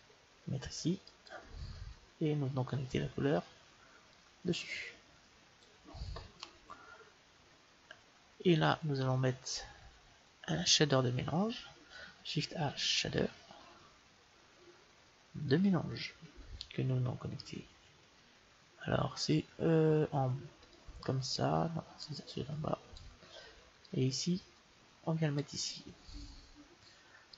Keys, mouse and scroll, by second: 4.0-5.9 drag, 12.3 shift+a, 20.7-25.8 drag.